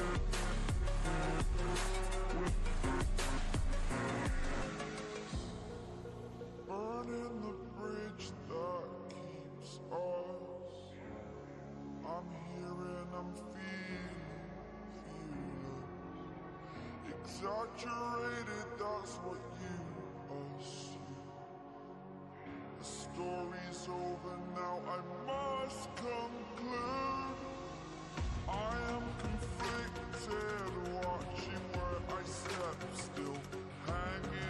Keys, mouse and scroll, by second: 0.4 click, 0.9-2.9 alt+drag, 14.9 space, 14.9 click, 15.1-15.4 space, 15.7-16.8 alt+drag, 18.3 ctrl+space, 18.5 ctrl+click, 18.7 ctrl+space, 19.5 click, 19.7 space, 19.9 click, 20.1-21.6 space, 24.4-26.1 drag, 27.3 right click, 28.1 click, 30.7-31.9 drag.